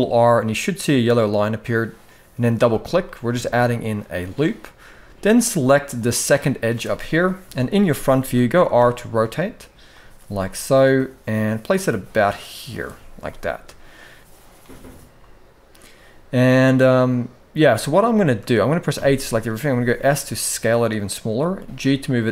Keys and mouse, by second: 2.7 middle click, 5.7 click, 7.2 KP_1, 7.9 shift+middle click, 8.3 r, 9.9 g, 13.0 shift+middle click, 17.8 shift+middle click, 18.6 a, 19.4 s, 21.1 g.